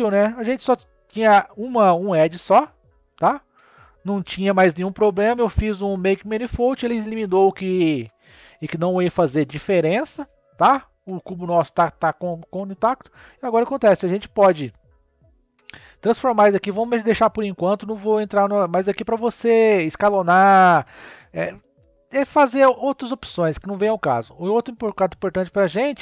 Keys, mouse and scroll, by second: 0.0 Tab, 2.5-3.5 middle drag, 3.5 scroll up 2, 4.4-5.2 scroll down 1, 10.2 click, 11.8 click, 14.2 click, 23.8-26.0 drag.